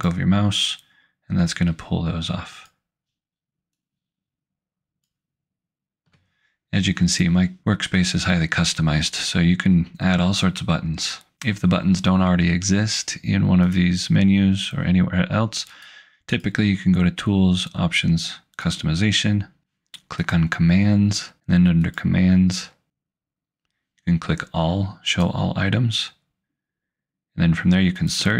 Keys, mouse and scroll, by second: 1.5 alt+click, 3.8 alt+click, 13.7 click, 15.8 click, 20.1 click, 21.7 click, 25.1 click, 28.0 click.